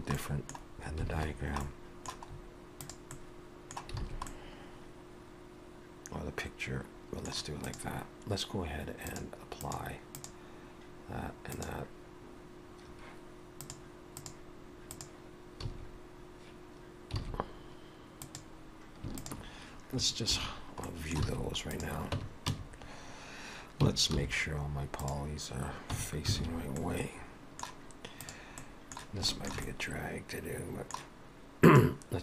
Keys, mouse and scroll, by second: 0.2 middle click, 1.2 alt+a, 1.3-2.3 scroll down 3, 1.7 middle click, 2.3-3.0 scroll up 3, 2.8 click, 3.2 middle click, 4.1 alt+a, 4.3 middle click, 7.7 click, 9.0 click, 9.6 click, 10.2 click, 11.5 click, 13.6 click, 15.7 a, 17.2 alt+a, 18.2 click, 19.1 shift+click, 20.3 shift+h, 20.9 middle click, 21.3 alt+a, 21.8 click, 22.2 Tab, 22.5 a, 24.2 alt+n, 26.0 Tab, 26.4 alt+a, 26.8 middle click, 28.3 click, 28.6 middle click, 29.3 shift+middle click, 29.7 middle click, 31.7 click.